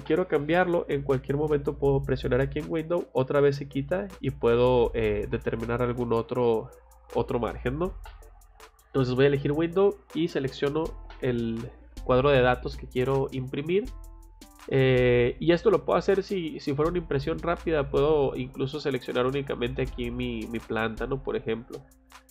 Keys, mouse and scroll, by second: 3.0 click, 4.9 click, 6.4 click, 15.7 click, 16.4 middle click, 17.1 scroll up 2, 17.8 scroll down 2, 18.7 click, 20.1 click, 22.1 click.